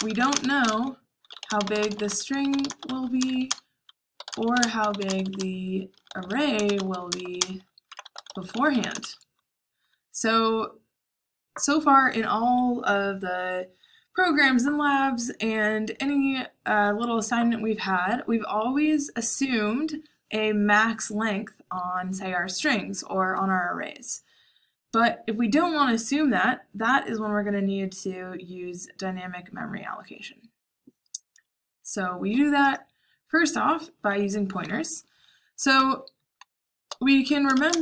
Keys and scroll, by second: 0.0-7.7 typing, 34.0 Escape, 34.6-35.7 typing, 36.8-37.8 typing.